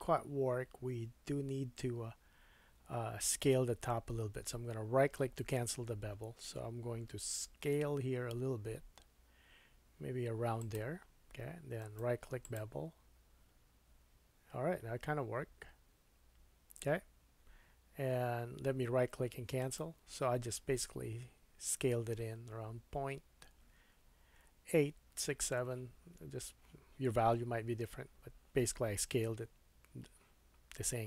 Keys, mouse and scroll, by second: 5.3-11.8 middle drag, 7.5 s, 11.8-19.7 right drag, 19.7-31.0 middle drag.